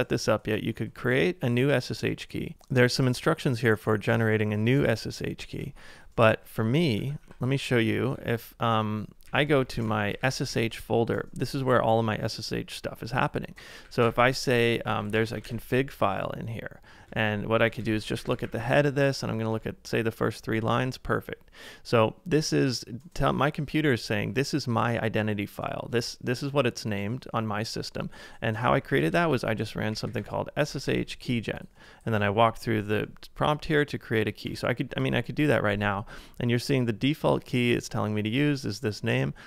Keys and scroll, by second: 4.8 super+Tab, 6.6 ctrl+c, 7.0 ctrl+a, 7.2-8.0 typing, 9.2-10.5 typing, 13.4-15.9 typing, 17.1-20.0 typing, 28.5-30.6 typing, 32.9-33.7 typing, 34.5 Return.